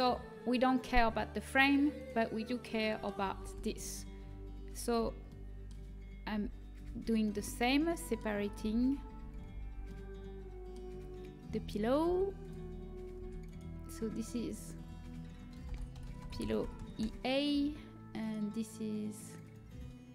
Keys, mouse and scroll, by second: 1.9 right click, 2.8 click, 3.4 Tab, 4.9 l, 6.2 l, 8.6-9.7 click, 9.0 click, 9.2 click, 12.0 p, 13.2 Tab, 16.0 l, 18.2-19.2 right drag.